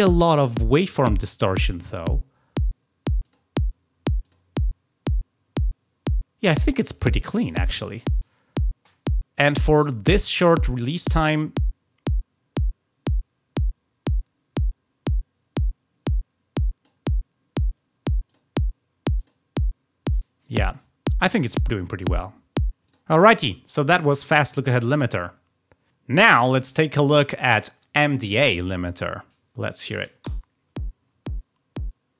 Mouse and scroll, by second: 3.1 click, 4.1 click, 10.6-16.8 drag, 18.2 click, 19.1 click, 20.3 click, 22.1 click, 22.8 click.